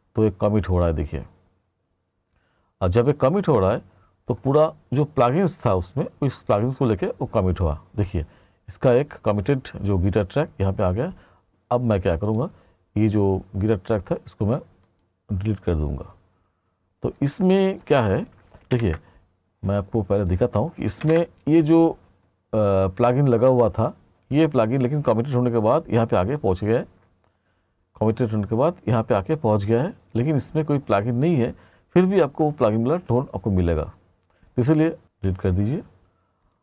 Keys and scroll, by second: 21.1 ctrl+=.